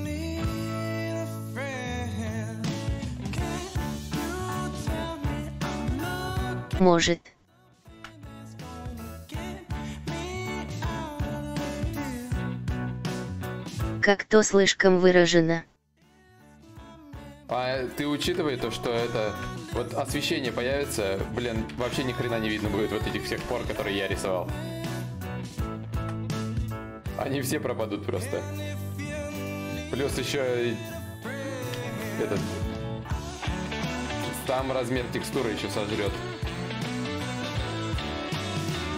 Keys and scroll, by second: 10.7 x, 16.1 ctrl+z, 16.1 y, 25.5 ctrl+z, 25.9 x.